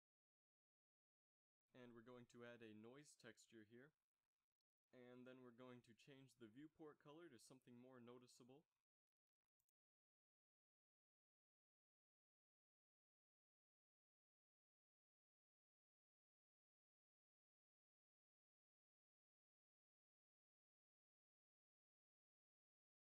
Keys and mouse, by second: 1.8 shift+a, 6.1 middle click, 8.0 KP_Divide, 11.2-13.4 drag, 14.9-16.5 middle drag, 16.9 shift+z, 18.0 z, 18.2 z, 18.5 middle drag.